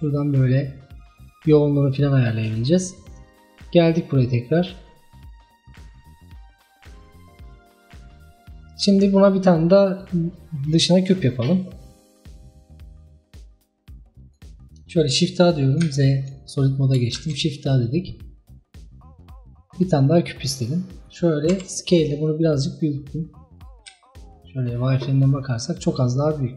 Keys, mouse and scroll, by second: 3.5-4.0 drag, 4.0-4.4 scroll down 6, 8.1 scroll down 1, 8.3-8.7 middle drag, 8.7-9.2 scroll up 3, 9.2-9.8 middle drag, 9.8 scroll down 1, 13.0-14.7 drag, 14.7-15.9 scroll up 1, 15.9 z, 16.7 scroll up 2, 17.2 shift+a, 21.6 s, 23.9 z, 25.6 scroll up 2, 25.8-26.5 middle drag.